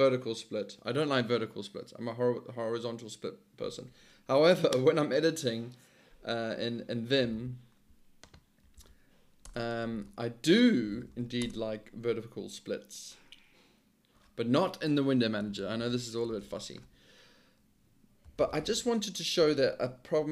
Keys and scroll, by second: 7.0-7.8 typing, 8.8 ctrl+d, 9.5 Return, 9.7-11.7 typing, 15.5-16.4 typing, 15.9 Return, 16.5 Return, 18.0-19.9 typing, 20.2 Tab.